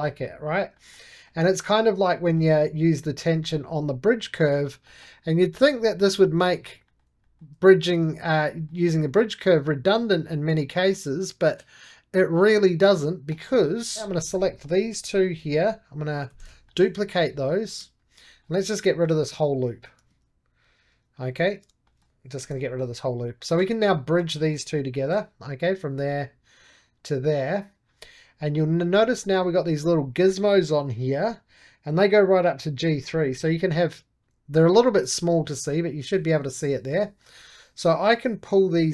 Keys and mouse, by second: 0.0-1.5 middle drag, 1.5-3.0 middle drag, 3.0-4.8 drag, 4.8-7.5 middle drag, 7.6 middle click, 8.4-11.4 middle drag, 13.2-14.3 drag, 14.4-16.2 middle drag, 16.2 shift+d, 16.6 middle click, 16.9 click, 17.2 3, 17.5 click, 18.2-19.5 middle drag, 19.5-21.7 drag, 21.7 middle click, 22.3 shift+x, 22.5 middle click, 23.0 2, 23.3 click, 24.3 middle click, 24.9 shift+b, 25.7-29.1 drag, 29.1-31.6 middle drag, 32.1-34.6 drag, 34.6-36.1 shift+middle drag, 36.6 shift+middle click, 38.2-38.9 drag.